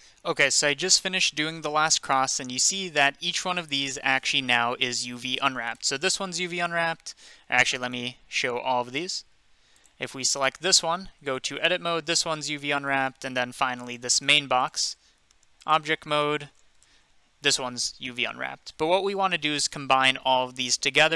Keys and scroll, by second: 0.0-0.1 typing, 6.6 Tab, 10.0 Tab, 11.2 Tab, 11.8 Tab, 15.2 Tab, 16.5 Tab.